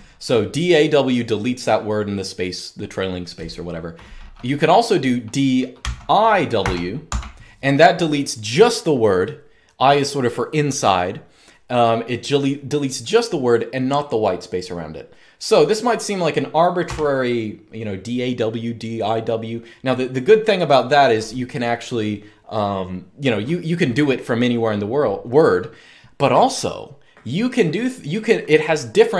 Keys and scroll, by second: 5.5-7.3 typing, 16.5 u.